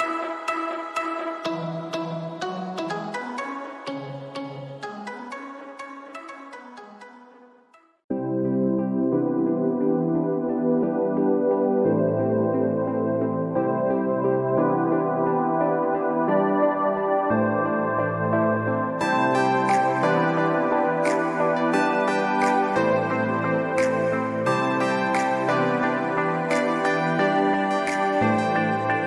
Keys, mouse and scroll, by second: 0.7 alt+scroll down 1, 1.2 click, 4.0-4.5 alt+scroll up 1, 4.5 click, 6.4-6.9 scroll up 1, 6.9 scroll down 1, 7.7 alt+scroll up 1, 8.0 alt+scroll down 1, 8.2 alt+scroll up 1, 8.9 alt+scroll down 1, 9.9 click, 10.6 scroll up 1, 13.0 click, 13.5 ctrl+z, 14.4 typing, 15.4 click, 19.0 ctrl+z, 19.5 click, 27.4 scroll down 1, 28.0-28.6 scroll up 1, 29.0 alt+scroll down 1.